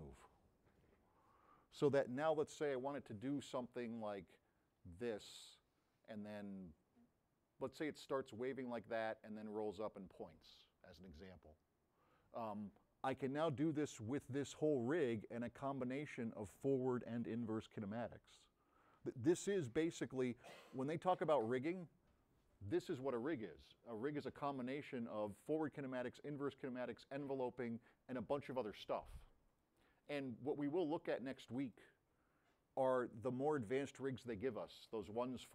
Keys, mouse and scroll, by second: 15.6-17.1 drag, 20.8-21.3 drag.